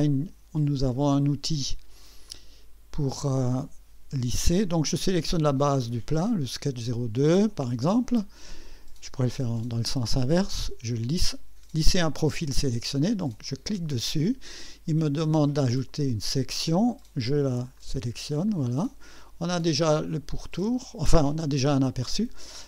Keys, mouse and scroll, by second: 2.3 click, 5.5 click, 13.4 click, 15.7 click, 17.0 click, 17.7 right click, 18.5-20.3 drag, 21.4 click, 22.4-22.6 drag.